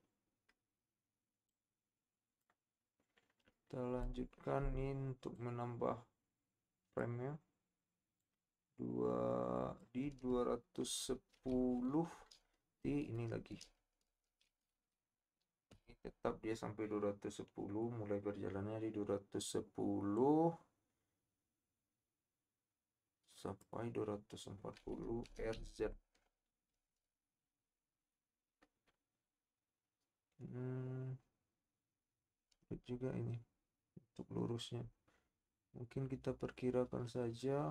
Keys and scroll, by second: 11.6 KP_7, 25.3 r, 25.6 z.